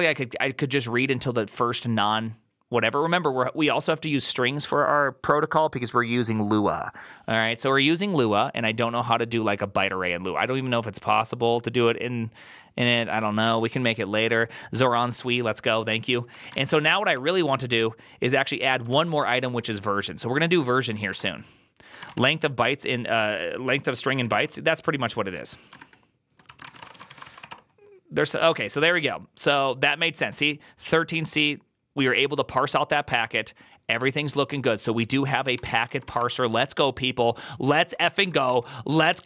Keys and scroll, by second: 16.1-17.5 typing, 18.7-19.5 typing, 20.8-22.4 typing, 21.0 Return, 23.8-27.6 typing, 25.6 ctrl+^, 35.2 ctrl+a, 35.2-36.5 typing, 37.9 ctrl+t, 38.1-39.2 typing, 39.0 ctrl+c.